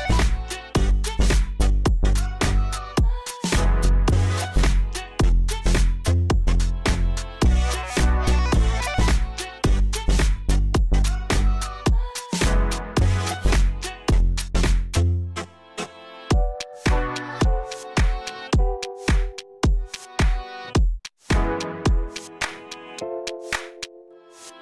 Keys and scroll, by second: 0.1 ctrl+c, 3.5 2, 4.0 F3, 4.3 F4, 7.6 t, 7.8 z, 8.1 F4, 9.8 p, 10.3 z, 15.1 F4, 15.9 alt+h.